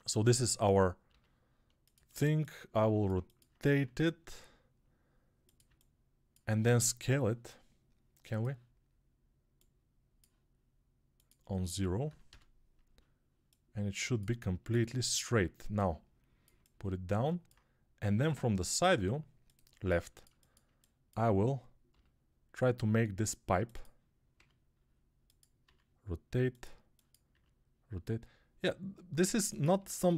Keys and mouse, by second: 0.9 g, 1.8-16.4 alt+shift+middle drag, 3.8 r, 12.8-24.2 alt+drag, 21.8 g, 24.2-27.2 middle drag, 24.2 g, 25.5 r, 27.2-29.7 drag, 27.2 r, 29.7-30.1 middle drag, 29.7 g.